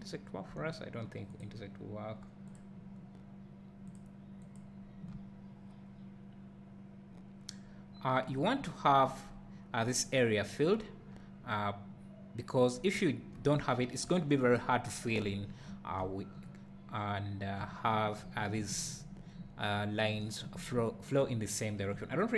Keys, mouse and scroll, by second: 5.1 `, 9.3 scroll up 1, 11.2 `.